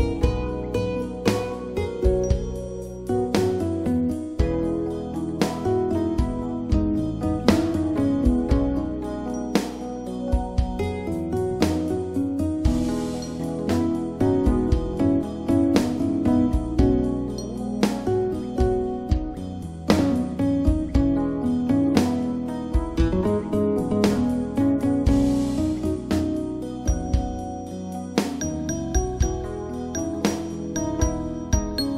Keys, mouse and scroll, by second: 4.0 click, 6.2 click, 10.1 click, 11.8 click, 13.4 click, 19.1 click, 23.9 click, 29.0 click.